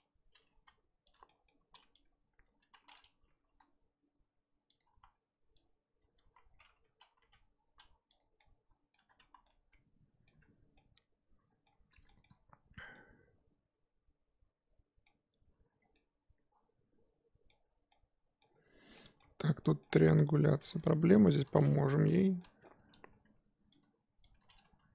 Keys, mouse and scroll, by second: 0.5 g, 1.3 middle click, 1.7 z, 2.4 ctrl+Left, 2.7 z, 3.5 g, 5.0 z, 6.0 ctrl+Left, 6.3 z, 7.2 g, 8.4-9.0 middle drag, 9.0 Tab, 9.3 z, 9.4-10.4 middle drag, 10.4 Tab, 10.8-11.7 middle drag, 11.7-12.9 scroll up 3, 12.1 shift+middle drag, 12.9-15.4 middle drag, 15.4 Tab, 15.8 scroll down 1, 15.9-17.6 middle drag, 17.6 Tab, 17.7 scroll up 2, 17.9-18.5 middle drag, 18.5-18.9 scroll up 2, 18.9-19.3 middle drag, 19.3 Tab, 19.6 middle drag, 19.8 Tab, 20.2 scroll up 2, 20.8 click, 21.2 shift+click, 22.0 j, 22.4-22.7 middle drag, 22.7 Tab, 23.1 Tab, 23.8 click, 24.4 click, 24.6 g.